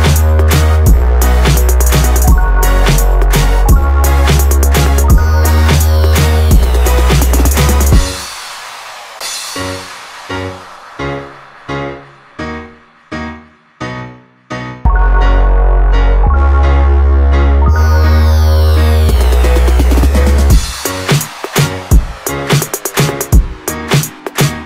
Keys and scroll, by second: 20.8 ctrl+l.